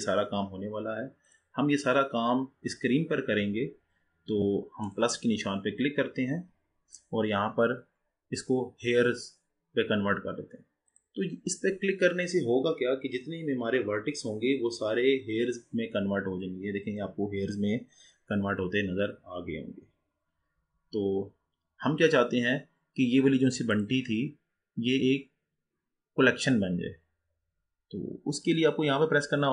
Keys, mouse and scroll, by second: 4.8-8.0 drag, 15.1-24.1 drag.